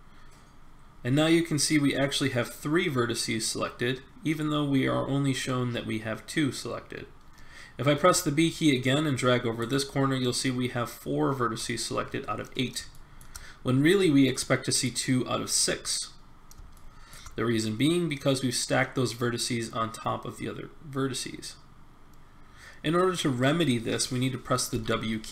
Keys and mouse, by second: 0.4 b, 7.9 b, 11.6 middle click, 16.4 middle click, 24.7 w.